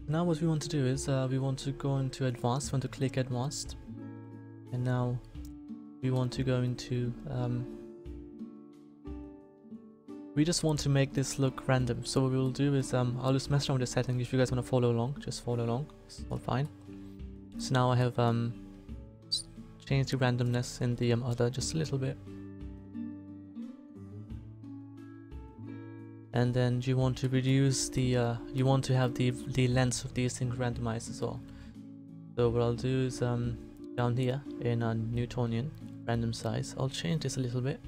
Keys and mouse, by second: 2.3-3.9 drag, 3.9-6.4 middle drag, 19.2 click, 19.8-21.2 middle drag, 22.8-26.0 drag, 26.0-27.2 middle drag.